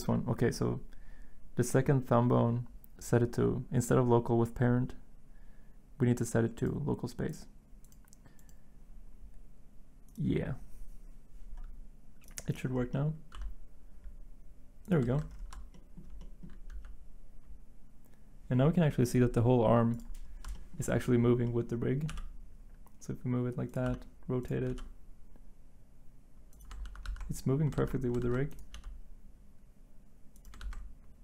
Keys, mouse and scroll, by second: 13.3 r, 15.1 ctrl+z, 16.7 g, 22.1 g, 23.8 r, 24.7 g, 26.8 ctrl+z, 27.0 ctrl+z, 27.8 ctrl+z, 28.2 ctrl+z, 28.7 g, 30.6 ctrl+z.